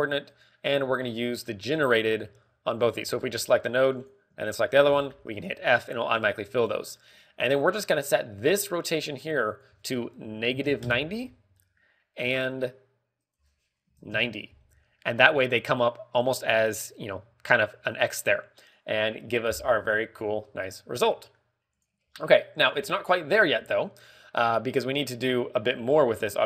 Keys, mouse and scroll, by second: 0.6 g, 1.3 click, 2.2 click, 2.4 ctrl+click, 3.6 shift+click, 3.7 shift+click, 4.0 f, 4.4 middle click, 4.9 click, 5.4 shift+click, 5.8 f, 6.2 a, 6.5-6.9 scroll down 3, 6.8 middle click, 7.1-7.5 scroll up 5, 7.5 middle click, 8.0 scroll up 1, 8.5 middle click, 9.1 ctrl+click, 10.5 ctrl+click, 12.5 middle click, 14.1 ctrl+click, 15.9 middle click, 21.1 click, 21.5 middle click.